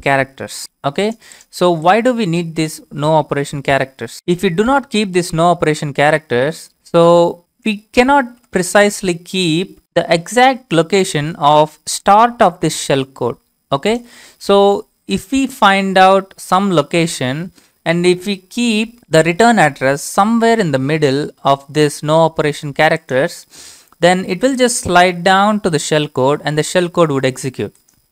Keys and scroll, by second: 3.5 ctrl+c, 4.7 ctrl+v, 4.9 ctrl+v, 5.0-5.9 ctrl+v.